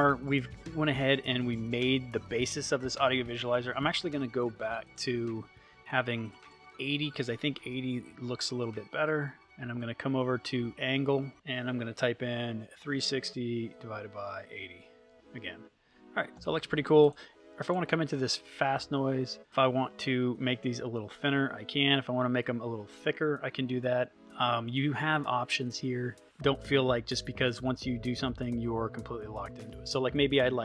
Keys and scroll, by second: 7.8 8, 9.2 Tab, 11.9 3, 14.5 0, 15.1 Return.